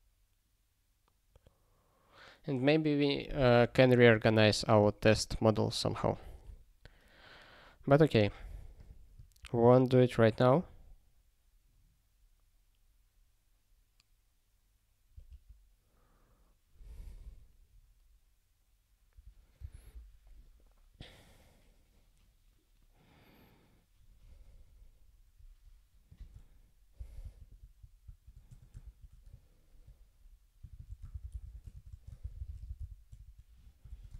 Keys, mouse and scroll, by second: 6.4 click, 6.7 click, 8.8 click, 8.8 click, 9.4 ctrl+p, 15.1 ctrl+space, 15.3 ctrl+p, 19.6 ctrl+w, 24.0 scroll down 1, 24.1 scroll, 24.2 scroll down 1, 26.1 click, 27.0 Return, 27.2 ctrl+y, 28.0 ctrl+a, 28.5 Tab, 28.8 ctrl+p, 30.6-34.1 typing, 33.9 ctrl+BackSpace.